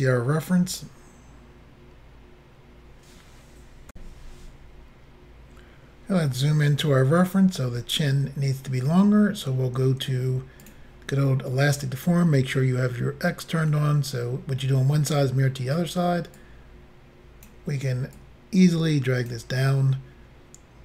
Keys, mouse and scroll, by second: 3.9 Insert, 6.1-7.2 scroll up 3, 10.7 click, 16.4 click, 18.2 click.